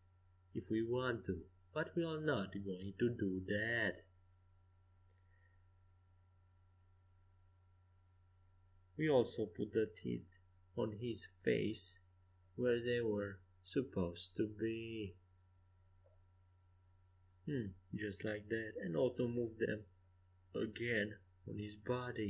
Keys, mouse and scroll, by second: 1.1-4.4 right drag, 4.4 middle click, 6.1 ctrl+j, 9.8-12.1 right drag, 11.1-15.5 drag, 15.5-16.6 middle drag, 17.5-19.4 drag, 21.5-22.2 drag.